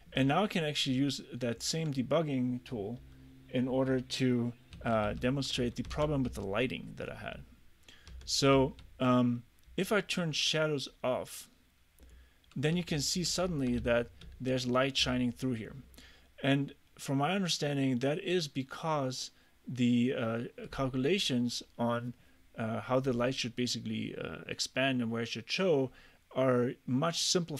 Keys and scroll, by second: 4.8-8.6 typing, 12.8 a, 13.5 w, 13.9 d, 15.1 s.